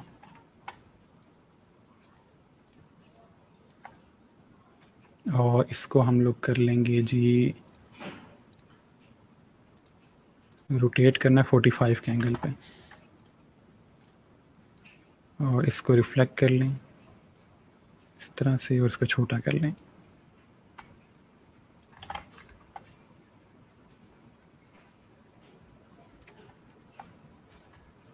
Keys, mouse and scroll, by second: 1.1 click, 2.5 click, 7.5 click, 8.3 right click, 9.6 click, 11.8-12.6 typing, 13.0 click, 14.6 right click, 16.5 click, 21.9 ctrl+z, 22.2-23.3 alt+scroll up 2, 23.7 click, 26.5-27.4 alt+scroll down 2, 27.4 click.